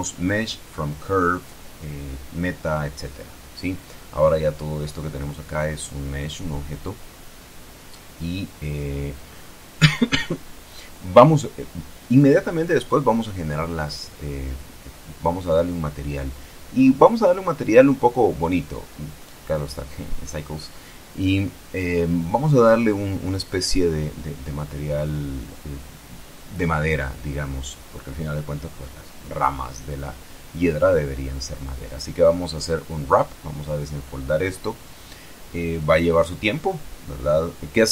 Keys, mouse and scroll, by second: 2.5 click, 10.8-11.8 middle drag, 12.9 n, 15.2 click, 17.2 click, 19.3 click, 20.1 click, 21.3 click, 27.9 u, 29.7 Tab, 30.5 a, 31.6 u, 32.6 click.